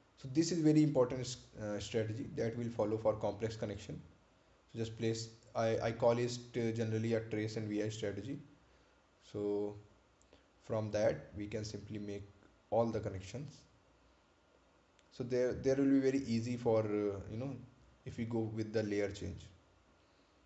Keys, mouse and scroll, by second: 4.7 right click, 6.5 ctrl+v, 9.0 click, 10.0-10.8 scroll down 1, 12.6 ctrl+click, 14.7-15.3 ctrl+scroll down 1, 17.9 ctrl+click, 19.3-19.6 scroll up 1.